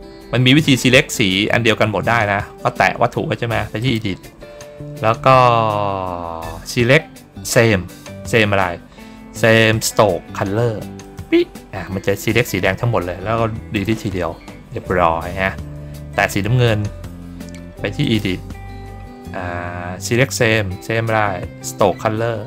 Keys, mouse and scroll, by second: 1.0 ctrl+middle click, 1.0 ctrl+scroll down 1, 3.7 click, 10.9 click, 16.0 ctrl+click, 17.9 click.